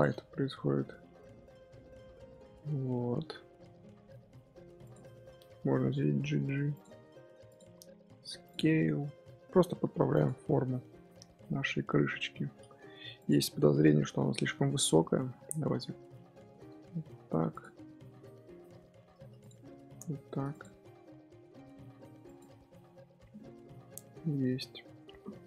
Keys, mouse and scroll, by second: 0.1 scroll down 1, 0.4 Tab, 0.5-2.7 middle drag, 2.7-3.1 scroll up 1, 3.1 Tab, 4.7 alt+click, 5.6 g, 7.4 alt+click, 7.8 s, 8.6 g, 10.2 Tab, 10.5 scroll down 1, 10.6-12.1 middle drag, 12.1-12.6 scroll up 3, 12.6 Tab, 12.8 3, 13.1 click, 13.5-15.2 middle drag, 15.2 KP_Add, 16.7 g, 19.3 click, 19.7 g, 20.9 s, 22.4 Tab, 22.8 scroll down 2, 23.0-24.2 middle drag, 24.2-24.7 scroll up 1, 24.7-25.4 scroll up 1.